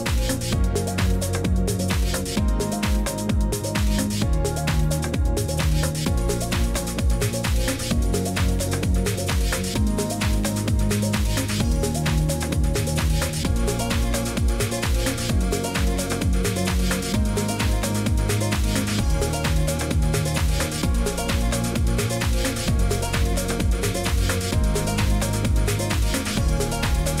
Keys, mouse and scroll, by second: 0.5 click, 3.2 click, 3.7 click, 5.1 click, 7.4 click, 8.1 click, 9.6 click, 9.6-12.0 scroll, 9.7 click, 12.0 scroll, 12.3 scroll down 3, 13.5 click, 16.7 click, 18.3 click, 18.7 click, 20.4 click, 21.5 click, 22.5 click, 23.8 click, 25.1 Escape, 25.7 click, 26.4 click.